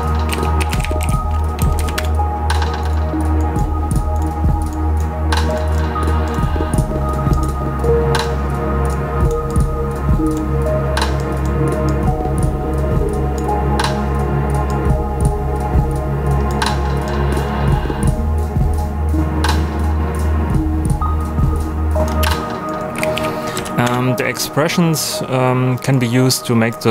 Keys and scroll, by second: 0.0-1.5 typing, 1.6 Down, 1.9 Return, 22.2-23.6 typing, 23.8 Return.